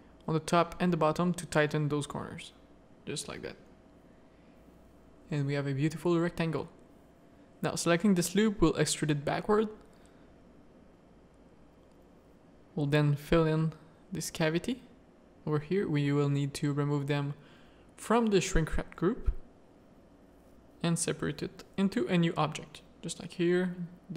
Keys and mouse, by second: 0.0 ctrl+r, 2.0 Tab, 2.7 alt+a, 3.1-4.7 drag, 4.8 Tab, 5.2 z, 5.3 a, 5.6 1, 6.5 shift+middle click, 7.0 middle click, 7.8 e, 10.1 middle click, 11.3 2, 12.5-16.2 typing, 14.6 middle click, 15.5 middle click, 17.4 click, 19.2 ctrl+KP_Add, 20.3 click, 21.3 Tab, 21.6 alt+a, 21.9 z.